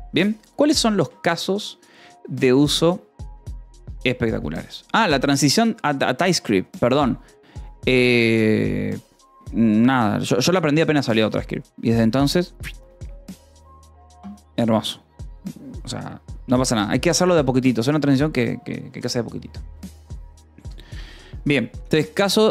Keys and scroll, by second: 0.9 :, 1.1 space, 5.3 space.